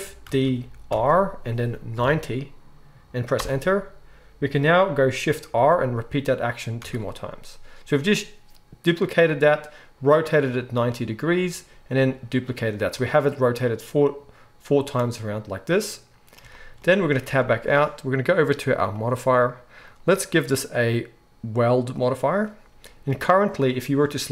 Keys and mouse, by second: 0.2 shift+d, 5.5 shift+r, 6.8 shift+r, 17.2 Tab, 19.0-19.8 middle drag, 19.8-24.3 drag, 23.1 Tab.